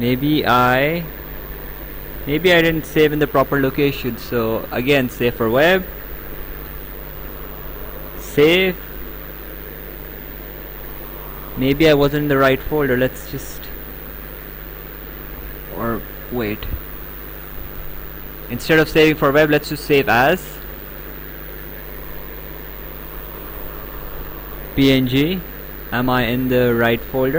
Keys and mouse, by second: 1.3 click, 2.1 alt+Tab, 4.3 click, 5.4 click, 8.2 click, 13.4 click, 15.3 click, 16.4 Escape, 17.2 click, 20.1 click, 22.2 click, 24.5 click.